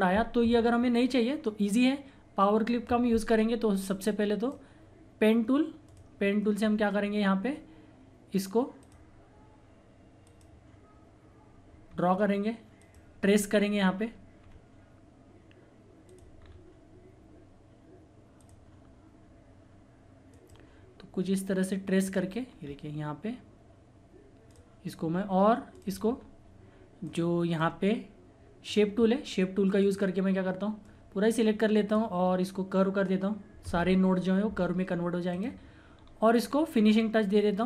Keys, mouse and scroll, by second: 3.8 click, 3.9-5.8 drag, 6.6 scroll up 1, 8.8 click, 11.9-12.8 scroll up 1, 12.8 click, 13.1 scroll down 1, 16.0 click, 16.4 scroll down 1, 18.3 click, 18.4 click, 22.4 scroll up 1, 24.4 click, 26.0 scroll down 1, 27.0 click, 27.0-32.8 drag, 35.3 click, 35.9-36.5 scroll up 1.